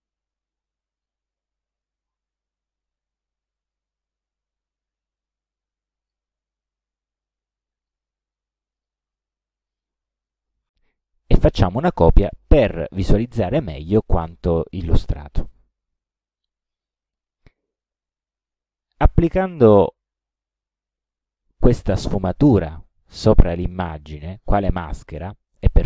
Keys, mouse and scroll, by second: 1.0 click, 3.7 click, 5.2-6.3 drag, 7.2 click, 8.8 shift+click, 9.4 ctrl+shift+scroll down 2, 10.7 ctrl+d, 11.3-13.1 ctrl+drag, 13.4 ctrl+scroll up 1, 14.1 ctrl+scroll up 2, 14.8 ctrl+click, 16.0 ctrl+click, 17.7 click, 18.9 shift+click.